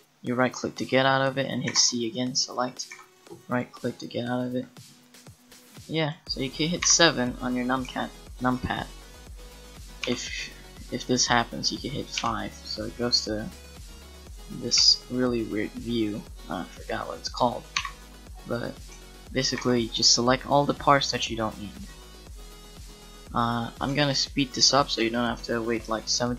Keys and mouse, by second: 0.3-1.7 middle drag, 1.7 c, 2.9 c, 6.8 KP_7, 10.0 KP_5, 12.2 KP_5, 14.7 KP_5, 16.0 middle click, 16.2 middle click, 17.8 KP_7, 19.6 c.